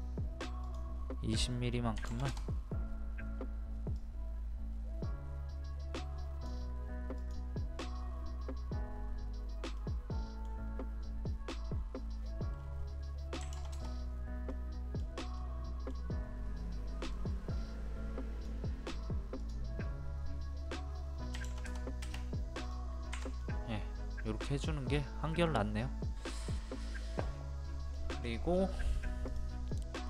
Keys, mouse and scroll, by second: 2.0 KP_2, 4.0-6.7 drag, 9.8 middle click, 13.4 KP_2, 14.5 middle click, 15.4 middle click, 17.1-18.7 drag, 21.4 KP_2, 22.7 click, 23.1 Escape, 23.4-27.9 middle drag, 27.9 scroll down 1, 28.0 scroll up 1, 28.2 scroll down 1, 28.3 scroll up 1, 28.5-29.0 scroll down 1, 29.0 click, 29.8 scroll down 1.